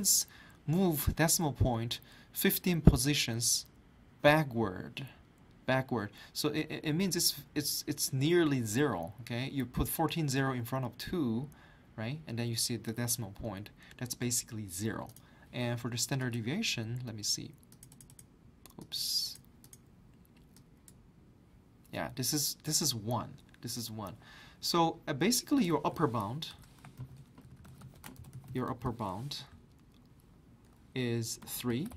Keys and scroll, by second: 26.5 Return, 26.7-29.0 typing, 31.2-31.9 typing.